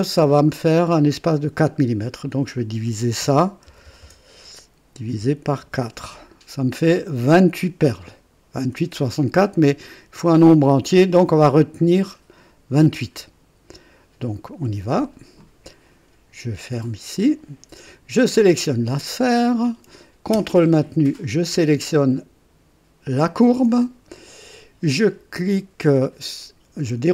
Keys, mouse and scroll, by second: 3.6 BackSpace, 5.6 KP_4, 6.0 Return, 15.4 click, 17.1 click, 18.4 click, 23.2 ctrl+click.